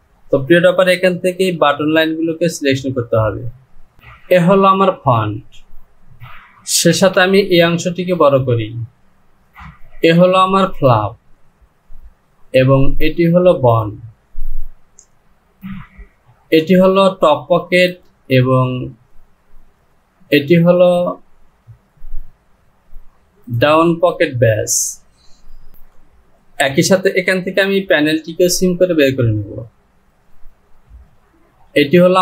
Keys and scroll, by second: 7.0 Return.